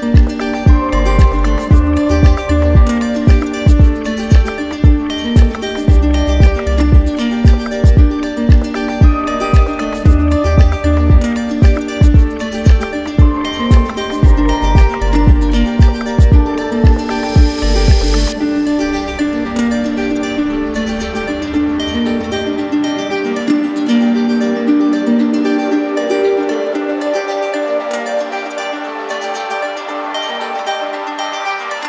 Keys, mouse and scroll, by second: 6.4 click, 8.8 click, 10.0 right click, 11.0 click, 11.7 click, 12.7 click, 13.1 click, 13.5 click, 14.4 click, 15.4 click, 16.4 click, 16.9 click, 23.2 click, 26.3 click, 26.8 click, 27.9 click, 28.9 shift+click, 30.8 click, 31.7 click.